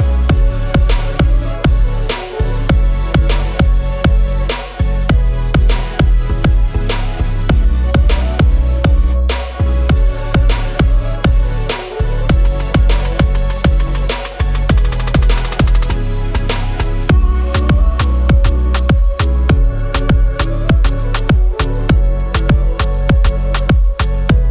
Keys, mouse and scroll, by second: 2.6 right click, 3.4 click, 4.2 right click, 5.4 click, 6.7 click, 7.4 click, 9.5-9.9 scroll down 2, 10.0 alt+click, 10.5 alt+middle click, 11.4-12.7 drag, 13.1-16.9 drag, 17.2 alt+click, 18.1 alt+middle click, 19.7-21.8 drag, 22.1 alt+click, 22.3-22.7 scroll up 3, 22.8 alt+click, 23.1 scroll down 2, 23.4 alt+middle click, 23.7 scroll down 2, 24.0 alt+click, 24.3 alt+middle click.